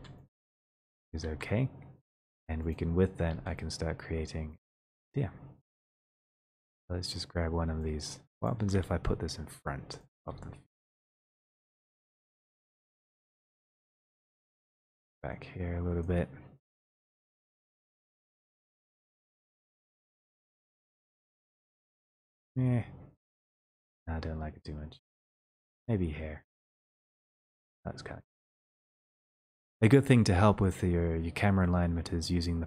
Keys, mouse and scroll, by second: 0.1 w, 1.3 click, 1.7 ctrl+z, 2.2 click, 2.8 click, 3.4 w, 4.9 click, 5.0 click, 6.1 click, 6.5 click, 8.7 click, 8.9 d, 10.0 click, 10.6 w, 14.1 click, 14.1 w, 26.5 click, 29.6 middle click, 29.7-30.7 scroll, 30.7 click.